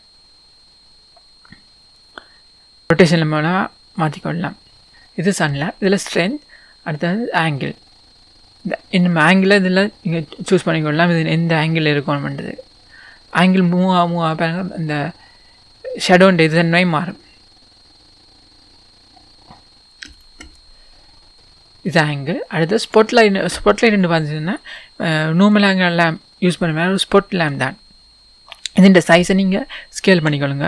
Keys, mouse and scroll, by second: 2.9 right click, 3.5-4.9 middle drag, 4.9-5.6 scroll up 2, 5.0-7.6 middle drag, 5.6-7.6 scroll up 1, 7.6-21.4 drag, 20.9-21.4 scroll down 2, 21.4-22.8 middle drag, 22.8 click, 23.7 scroll down 1, 25.7 click, 27.9-30.0 scroll down 1, 30.1 s.